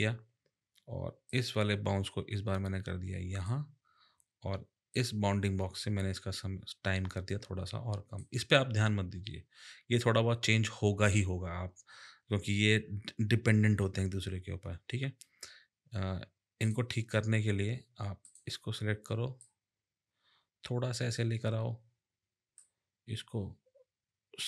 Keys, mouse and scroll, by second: 1.3 click, 4.9 click, 16.6 click, 18.2 click, 19.4 click, 22.6 click.